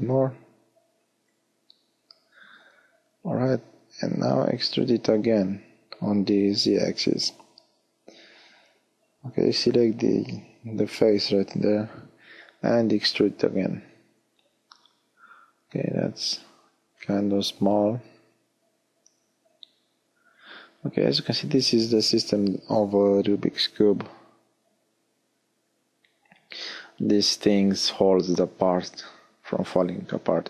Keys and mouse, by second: 3.7 e, 6.8 click, 11.1 e, 13.5 middle click, 14.0-15.5 drag, 18.3 middle click.